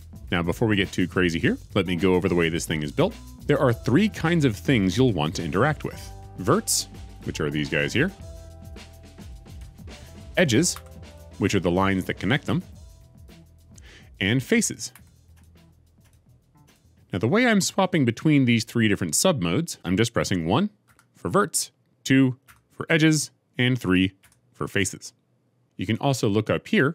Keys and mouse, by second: 7.0 click, 9.4 click, 10.8 2, 11.0 click, 14.9 3, 15.9 click, 16.6 click, 20.8 1, 22.4 2, 24.1 3.